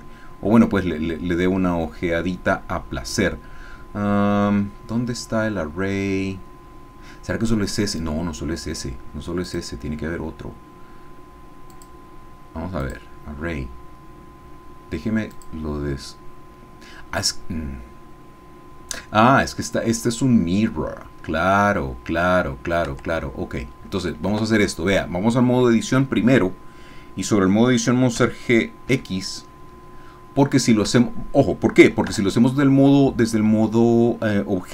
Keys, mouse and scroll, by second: 1.0-4.2 scroll down 2, 4.3-4.8 scroll up 2, 9.4 click, 11.7 click, 12.8 click, 15.3 click, 22.9 Tab, 24.3 a, 28.2 g, 28.9 x, 30.8 Escape, 32.2 Tab.